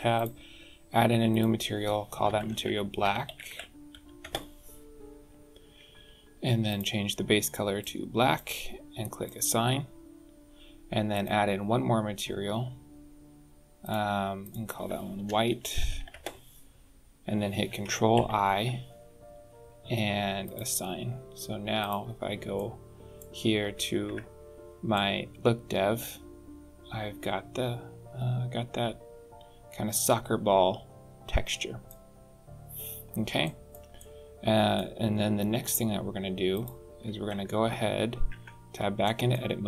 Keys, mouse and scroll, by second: 0.1 click, 1.3 click, 6.6 click, 9.2 click, 11.1 click, 13.9 click, 14.4 click, 18.1 ctrl+i, 20.4 click, 21.9 click, 22.5 middle click, 24.0 Tab, 24.9 middle click, 32.2-32.6 scroll up 3, 32.7 scroll down 3, 33.4 shift+middle click, 33.9 middle click, 35.1-35.6 scroll up 3, 35.6 scroll down 1, 36.5 click, 38.2 Tab, 39.0 shift+middle click.